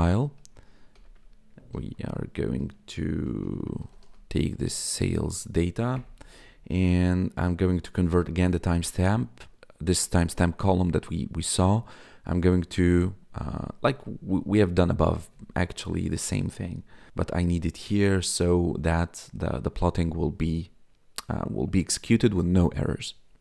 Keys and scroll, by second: 0.0-4.5 typing, 4.9 Right, 5.9 Return.